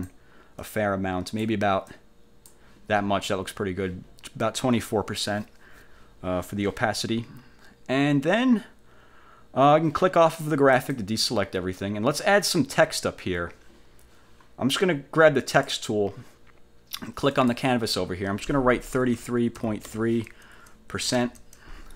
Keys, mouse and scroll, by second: 0.7 click, 2.0 click, 10.8 click, 12.0 scroll up 1, 15.7 click, 17.5 click, 19.1 3, 19.7 ., 20.0 3, 21.3 shift+5.